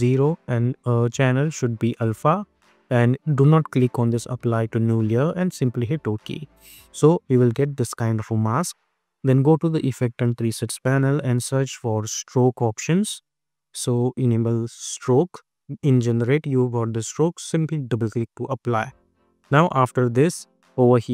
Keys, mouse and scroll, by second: 0.8 click, 5.4 click, 9.1 click, 9.6 ctrl+a, 10.2-11.7 typing, 13.3-14.3 typing, 16.9 click.